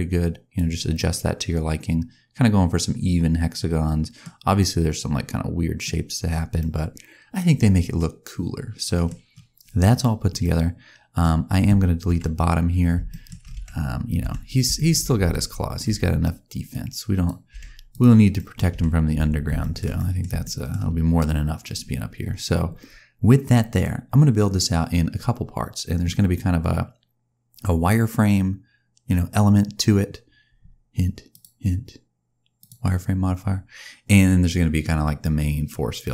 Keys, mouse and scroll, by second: 0.8 middle click, 4.5 middle click, 9.0-10.1 scroll down 1, 10.2 scroll down 1, 10.3 middle click, 12.0 KP_1, 13.0 shift+middle click, 13.5 Tab, 14.1 z, 14.6 shift+middle click, 15.2 alt+a, 15.6-16.7 scroll down 2, 15.8 b, 17.4 x, 18.2 middle click, 18.6 Tab, 19.0 z, 19.5 shift+middle click, 19.9 middle click, 20.3 shift+middle click, 20.8-21.5 scroll up 3, 31.2 click, 35.9 middle click.